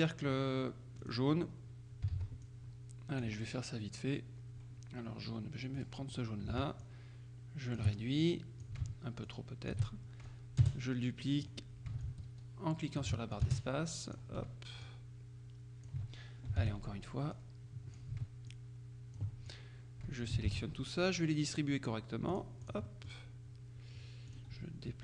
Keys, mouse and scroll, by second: 1.1 click, 2.2 ctrl+d, 2.5-3.8 ctrl+drag, 5.8 click, 6.9-8.4 ctrl+shift+drag, 9.4 ctrl+shift+click, 10.4-12.0 shift+drag, 10.7 space, 12.1-13.6 ctrl+shift+drag, 13.5 ctrl+shift+space, 14.9-16.5 ctrl+drag, 16.7 ctrl+d, 17.4-18.6 drag, 20.6 ctrl+shift+a, 22.4-23.6 drag, 23.0 right click, 24.4 click.